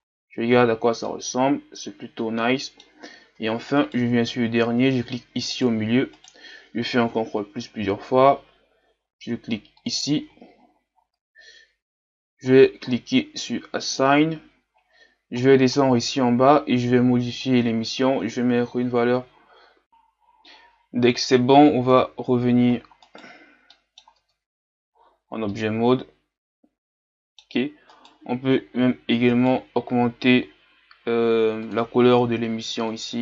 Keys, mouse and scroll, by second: 0.0-0.6 scroll down 2, 0.6-1.0 scroll down 2, 1.0-2.9 middle drag, 2.9-3.3 scroll up 5, 3.3 Tab, 3.8-5.1 right drag, 5.1-5.6 scroll up 2, 5.6-7.2 right drag, 7.2 ctrl+KP_Add, 7.4 ctrl+KP_Add, 7.7 ctrl+KP_Add, 9.8-19.8 drag, 21.6-23.1 scroll down 2, 23.1 scroll down 1, 23.1 right click, 23.8 middle click, 24.2 Tab, 25.1-25.5 scroll down 4, 25.5-27.9 middle drag, 27.9-33.0 right drag, 33.0 click.